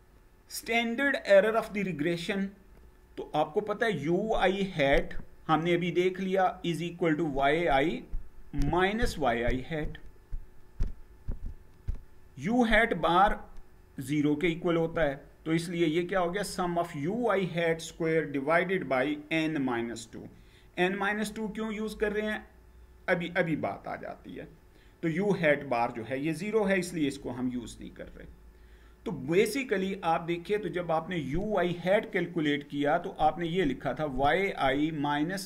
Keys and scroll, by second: 27.7 Down.